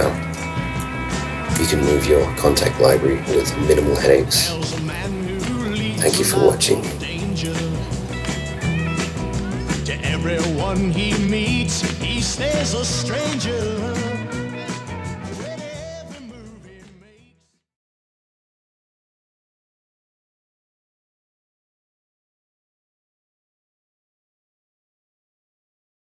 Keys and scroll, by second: 1.5 super+w.